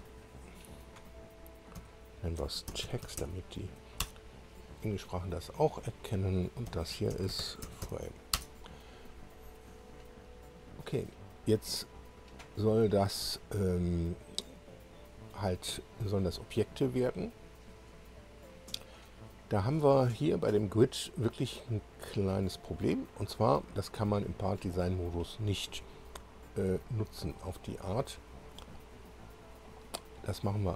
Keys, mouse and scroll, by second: 0.0-0.2 typing, 0.4 Return, 0.9 click, 1.8 F2, 2.4-3.7 typing, 4.5 Return, 5.9 click, 6.7 F2, 6.9-8.8 typing, 10.0 click, 20.6-20.9 scroll up 1, 21.6-23.2 drag.